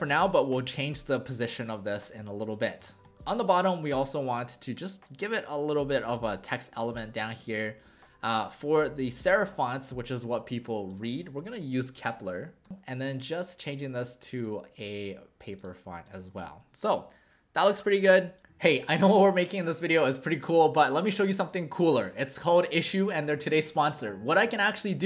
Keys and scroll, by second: 7.3 ctrl+a, 11.7-12.7 typing, 16.2 w.